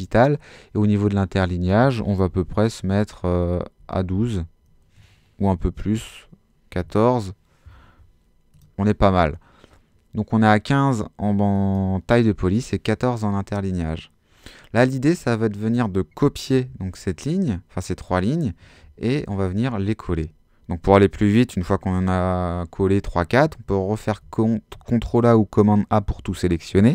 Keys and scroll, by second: 3.8 l, 4.0 2, 5.4 BackSpace, 6.8 4, 16.7 super+c, 18.8 super+v, 24.0 super+a.